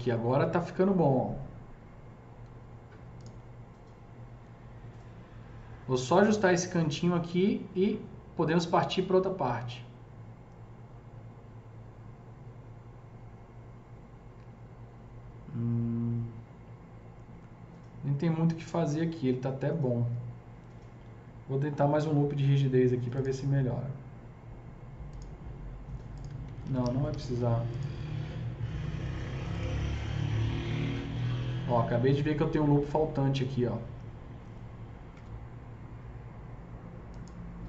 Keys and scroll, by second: 21.9 KP_0, 26.6 ctrl+z, 26.8 ctrl+z, 27.1 typing, 35.2 KP_0.